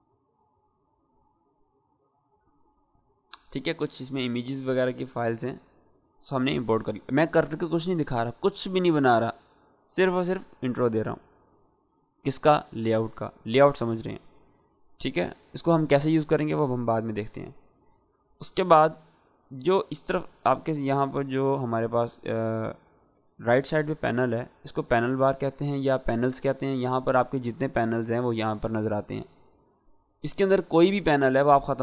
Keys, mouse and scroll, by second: 1.2-2.3 scroll down 1, 2.8 click, 3.3-5.0 scroll down 1, 5.0 click, 25.9 click, 25.9 click.